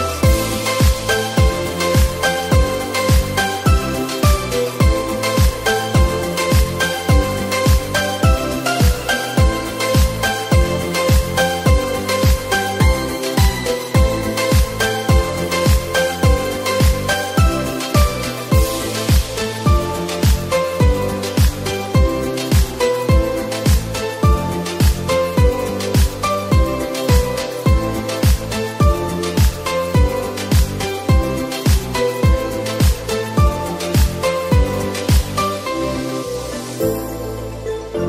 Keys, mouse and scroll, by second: 1.2 scroll down 1, 2.2 click, 4.0 x, 5.5 click, 6.6 click, 7.4 shift+a, 12.9-13.2 scroll down 4, 13.2 g, 14.7 scroll down 3, 15.4 s, 17.2 r, 18.6 KP_7, 19.3-20.6 scroll down 9, 20.6 g, 21.9-23.0 middle drag, 23.0 r, 24.3-25.8 middle drag, 25.8 KP_7, 27.1 r, 29.3-31.0 drag, 31.0 0, 33.6-35.1 drag, 35.1 0, 37.5-38.0 middle drag.